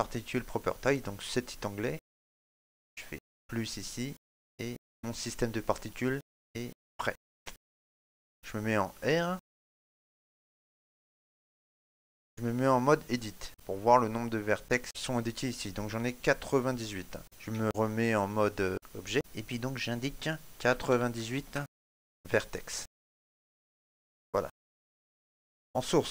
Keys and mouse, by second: 0.6 click, 7.2 shift+middle click, 7.2 right click, 7.2 z, 7.7 click, 11.4 middle click, 11.7 click, 11.7 ctrl+middle click, 12.7 right click, 13.5 Tab, 14.8 middle click, 18.7 Tab, 21.1 click, 24.4 middle click.